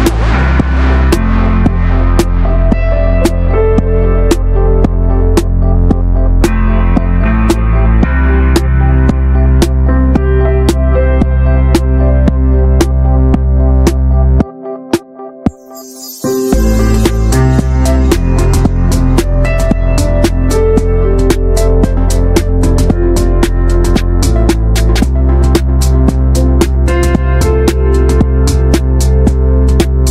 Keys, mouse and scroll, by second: 0.1 e, 2.1 middle click, 2.3-3.2 scroll up 3, 2.5 shift+middle click, 3.0 shift+middle click, 3.3-5.6 drag, 5.6 middle click, 6.2 alt+shift+click, 6.5 middle drag, 6.7 ctrl+b, 7.4-7.8 scroll down 1, 7.8 ctrl+r, 9.2 scroll down 1, 9.3 shift+middle click, 9.6 s, 10.2-10.7 middle drag, 10.7 ctrl+b, 11.8 scroll down 2, 11.9 drag, 12.2 shift+middle click, 12.3 scroll down 1, 12.4 middle click, 12.6 click, 12.6 ctrl+a, 12.9 middle click, 13.4-14.0 scroll up 1, 14.3-14.7 shift+middle drag, 14.7 click, 14.8 Tab, 15.0 middle click, 15.1 scroll up 1, 15.2 shift+middle click, 15.7 3, 15.8-16.9 drag, 16.9 Tab, 17.0 click, 17.1 ctrl+a, 17.4 middle click, 17.5-18.3 scroll up 2, 17.6 Tab, 17.8 shift+middle click, 18.3 click, 19.1 shift+middle click, 19.6 scroll up 1, 19.8 shift+middle click, 20.2 2, 20.3-22.6 drag, 22.6 ctrl+r, 27.5 Tab, 27.6 click, 27.7 scroll down 3, 27.8 middle drag, 28.1 ctrl+s, 28.3 shift+middle drag, 28.5 scroll down 1, 28.7-29.1 shift+middle drag, 29.1 Tab, 29.3 shift+middle click, 29.4 shift+scroll up 1, 29.6 3, 29.7 click.